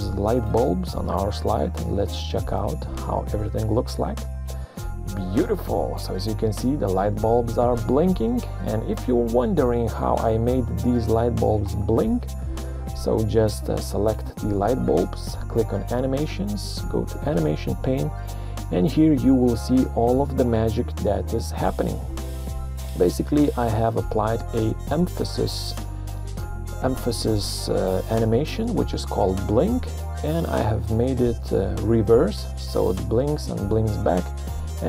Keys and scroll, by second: 3.0 Print, 8.5 Escape, 10.0 ctrl+scroll.